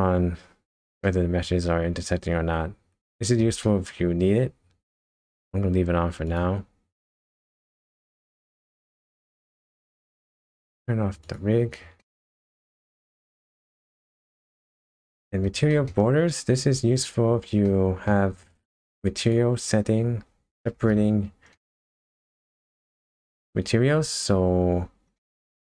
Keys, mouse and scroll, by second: 0.2-0.7 scroll down 3, 1.0 middle click, 3.6 shift+middle click, 5.2 scroll up 1, 6.3 click, 8.0 shift+middle click, 8.7 scroll up 1, 9.3 KP_0, 10.1-11.1 scroll down 2, 11.2 click, 12.0 shift+middle click, 12.5 middle click, 13.0 scroll up 1, 13.4 KP_0, 14.2 shift+middle click, 14.8 middle click, 15.7 shift+middle click, 16.5 scroll up 1, 17.0 scroll down 3, 17.6 middle click, 18.4 shift+middle click, 19.2 click, 20.9 KP_0, 21.6 middle click, 22.1-22.6 scroll up 3, 23.0 shift+middle click, 25.2 middle click.